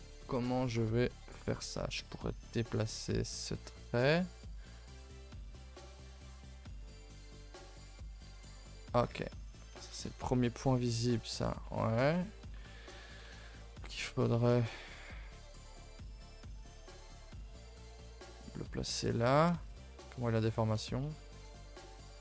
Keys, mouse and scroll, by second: 1.1 click, 9.4 click, 13.5 click, 21.7 click.